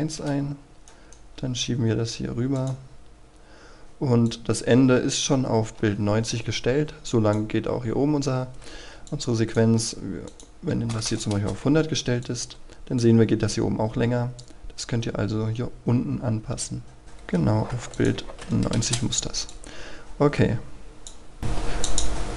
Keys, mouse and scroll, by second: 0.9 right click, 2.6-10.2 drag, 10.7 KP_1, 10.9 KP_0, 11.3 Return, 12.2-17.4 drag, 18.1 KP_9, 18.8 Return, 19.5-22.3 drag.